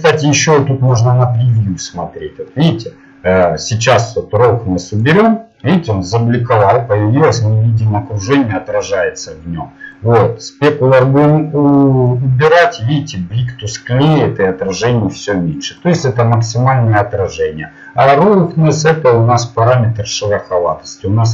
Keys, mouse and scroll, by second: 10.0 click, 18.5-19.9 drag.